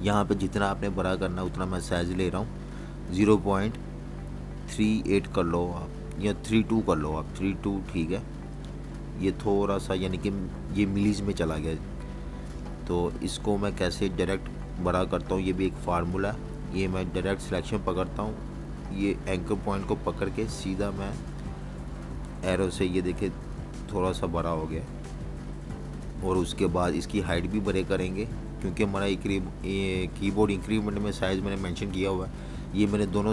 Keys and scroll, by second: 0.0-0.2 typing, 2.8 3, 5.5 2, 22.2 Right, 28.3 Up, 29.7 v, 31.3 super+-, 32.0 v, 32.2 space, 32.7 space, 33.2 super+-.